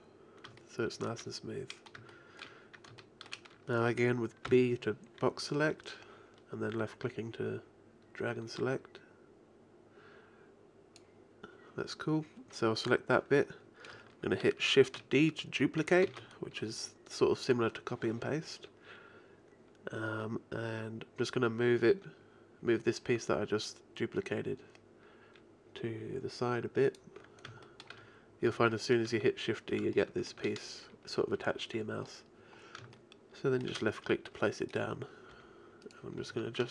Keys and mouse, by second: 0.0 click, 4.5 b, 16.1 shift+d, 27.6-32.1 middle drag, 34.9-36.3 right drag, 35.3 g, 36.3 middle click, 36.4 a.